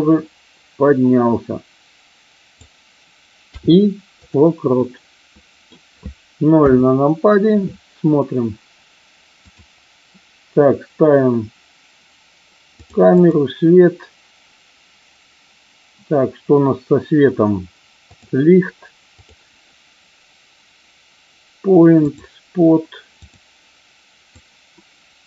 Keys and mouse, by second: 4.8-5.6 middle drag, 6.6 KP_0, 13.1 click, 18.0 click, 24.3-25.2 drag.